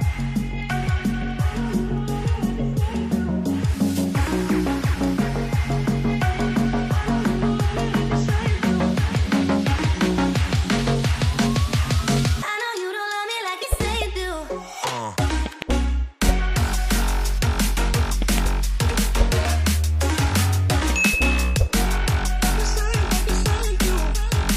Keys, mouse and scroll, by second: 0.4 double click, 1.4 right click, 2.4 ctrl+j, 2.7 ctrl+t, 3.3 alt+shift+click, 4.4 alt+scroll up 6, 4.9 alt+click, 5.9 alt+shift+click, 6.7 alt+shift+click, 7.1 alt+scroll down 1, 9.7 v, 10.0 alt+scroll down 1, 10.4 alt+scroll up 1, 13.4 space, 13.7 c, 21.5 v, 21.6 right click, 23.8 v.